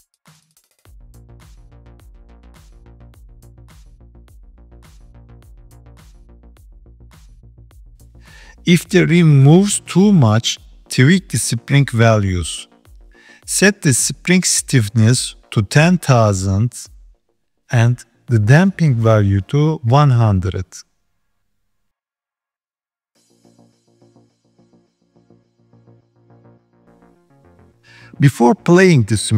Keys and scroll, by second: 19.3 KP_0.